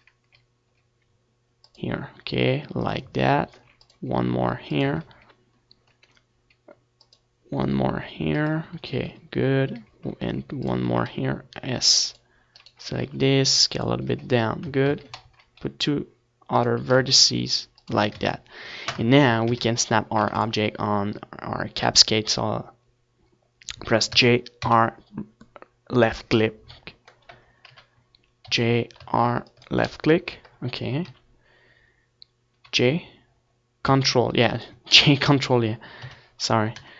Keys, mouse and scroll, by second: 1.3 ctrl+r, 4.1-5.9 drag, 4.3 a, 4.9 ctrl+r, 6.0-7.7 drag, 6.1 a, 7.1 ctrl+r, 9.4 ctrl+r, 9.5-11.3 drag, 9.8 a, 10.9 ctrl+r, 11.6-16.6 drag, 11.9 s, 13.5-15.2 right drag, 13.9 s, 15.0 Tab, 15.6 Tab, 15.8 a, 16.2 ctrl+r, 17.6-20.7 drag, 17.7 s, 18.8 Tab, 19.1 ctrl+s, 19.9 Tab, 20.2 a, 21.2 ctrl+s, 24.9 g, 26.7-28.6 drag, 28.6 KP_3, 29.2 g, 30.3-32.0 drag, 31.8 KP_3, 33.4 g, 35.3 click, 35.5-36.9 middle drag, 36.7 KP_1.